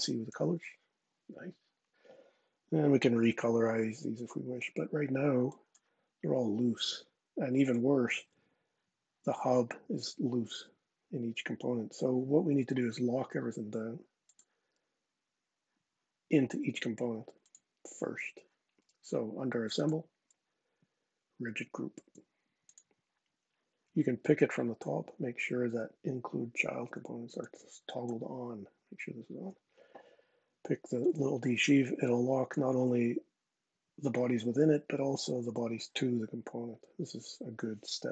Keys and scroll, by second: 0.1 shift+n, 6.5 super+z, 9.6 super+z.